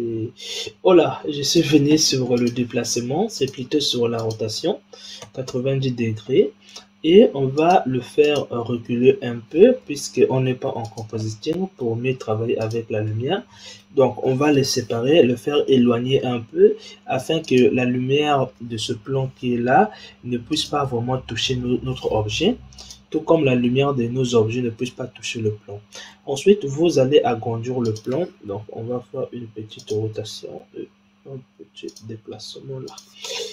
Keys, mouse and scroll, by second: 1.4-2.4 drag, 3.3 click, 4.1-7.1 drag, 7.5 click, 8.1 click, 8.8-9.8 scroll down 3, 9.8 g, 10.7 click, 11.1-12.6 middle drag, 12.6 click, 13.1-14.2 middle drag, 14.2 g, 17.8-19.0 scroll down 3, 19.0 g, 22.7 click, 25.1-26.1 scroll down 2, 26.1 s, 28.5 r, 30.3 g, 32.3 s.